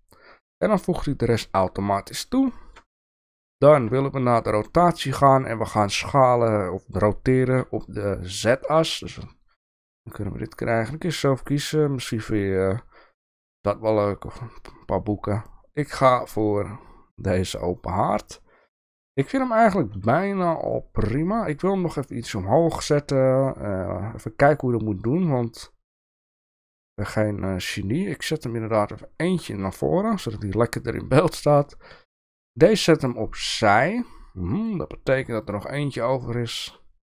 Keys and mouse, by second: 2.5 shift+middle click, 3.7 shift+middle click, 8.7-18.0 drag, 25.1 click, 28.8 click, 31.5 click, 33.0 click, 34.6 click.